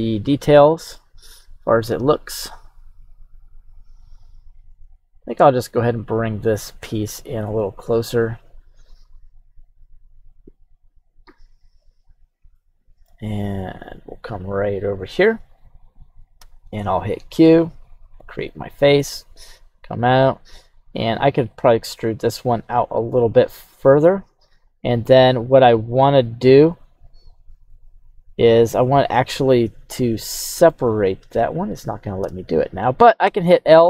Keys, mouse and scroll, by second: 0.9 click, 5.1 click, 7.1-8.1 drag, 11.8 click, 12.5-13.0 shift+scroll down 2, 12.5-13.0 middle drag, 15.2 click, 16.4 q, 17.2 click, 18.4 middle click, 19.1-19.4 scroll down 1, 20.9 e, 24.5-27.6 drag, 27.7-30.7 middle drag, 27.7-28.1 scroll down 1, 33.3 l.